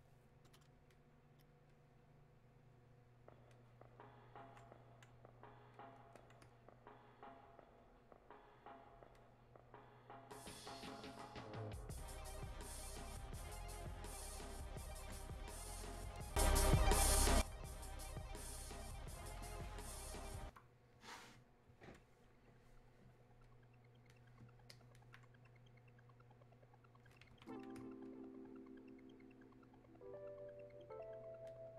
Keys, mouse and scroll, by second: 5.8-17.5 drag, 23.5-31.7 drag.